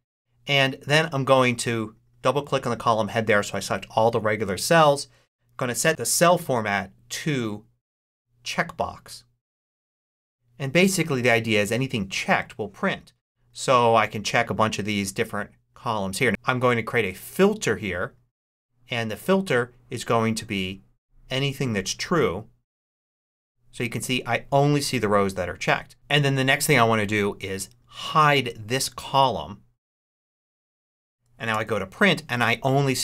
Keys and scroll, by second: 31.4 super+p.